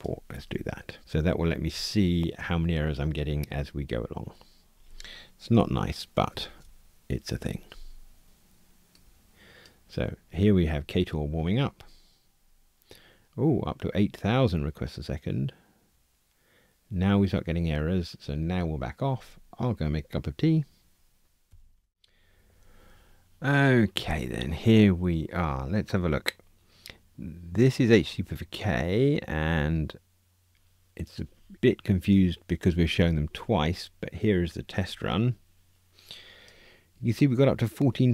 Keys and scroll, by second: 0.3 super+c, 1.0 super+v, 6.3 ctrl+r.